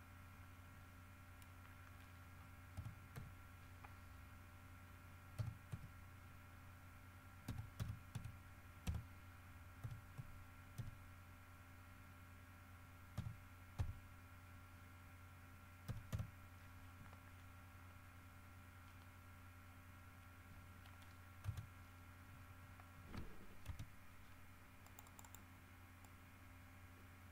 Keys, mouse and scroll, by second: 2.9 KP_4, 3.3 KP_Decimal, 5.5 KP_4, 5.9 KP_Decimal, 7.6 KP_5, 8.0 KP_7, 8.3 KP_2, 9.0 KP_Divide, 10.0 KP_1, 10.3 KP_Decimal, 10.9 KP_1, 13.3 KP_4, 14.4 KP_6, 16.0 KP_1, 16.3 KP_7, 21.6 Return, 23.8 Return, 25.0 click, 26.2-27.3 drag.